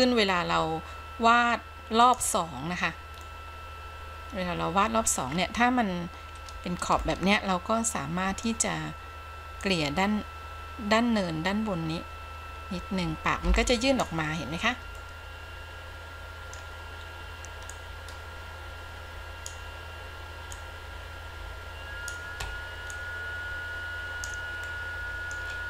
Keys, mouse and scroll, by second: 0.1-2.3 drag, 2.8-3.4 scroll down 2, 3.4-5.4 middle drag, 5.5-6.2 scroll up 2, 7.2-8.7 middle drag, 9.8-14.3 drag, 14.5-15.1 scroll down 1, 15.1-16.8 middle drag, 17.9-19.8 drag, 20.7-22.3 drag, 23.1-24.5 drag, 24.7 scroll down 1, 24.9 middle click.